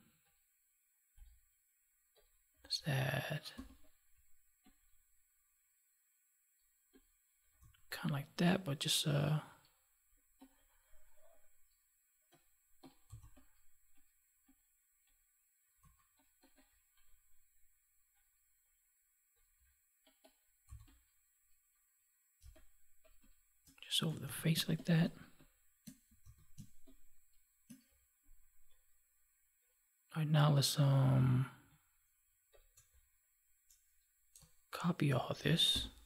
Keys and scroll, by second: 3.4 ctrl+j, 22.3 space, 26.1 ctrl+s, 26.5 space, 35.6 ctrl+j.